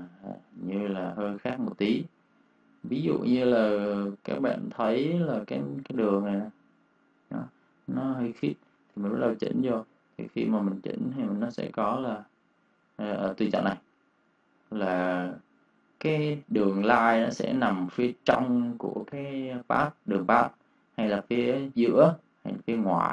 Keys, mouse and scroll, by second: 0.0 ctrl+z, 0.3 click, 0.5 space, 0.6 click, 1.9 space, 2.1 click, 4.4 space, 4.6 click, 8.3 click, 8.4 ctrl+space, 8.5 ctrl+click, 10.0 ctrl+click, 21.6 click.